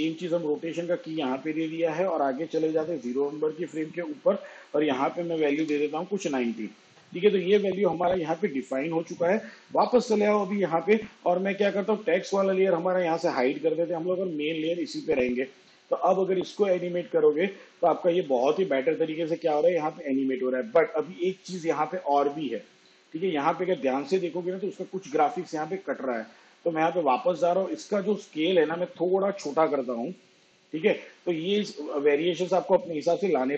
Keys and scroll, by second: 5.7 0, 28.6 s.